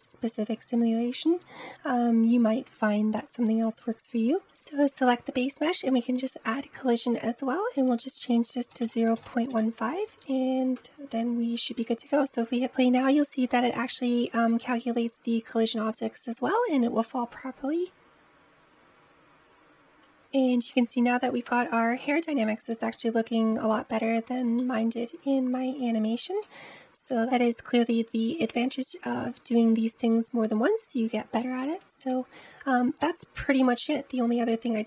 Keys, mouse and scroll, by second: 4.3 click, 6.0-10.6 drag, 12.0 space, 20.0 space, 20.1-25.1 middle drag, 25.1-25.8 scroll up 2, 25.8-26.2 scroll down 2, 26.2-27.1 middle drag, 31.0-33.9 middle drag, 33.9 click.